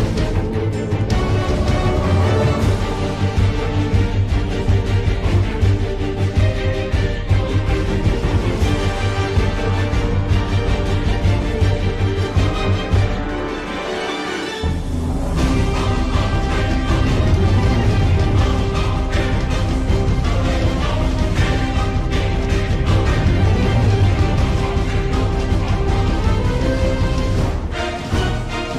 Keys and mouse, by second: 2.6 shift+middle click, 4.9 click, 5.5-8.5 drag, 9.2 click, 25.8 click, 28.4 click.